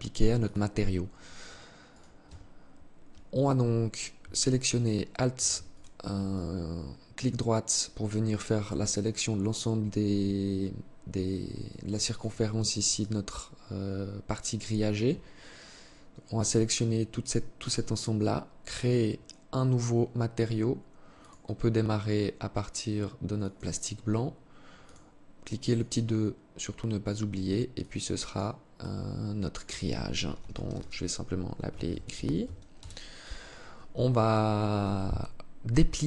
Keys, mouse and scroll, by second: 1.0 right click, 1.4 Tab, 2.5 alt+right click, 3.9 alt+shift+right click, 4.9 shift+right click, 5.5 alt+click, 10.9 alt+click, 12.2 alt+click, 17.9 click, 20.4 click, 24.0 click, 24.9 click.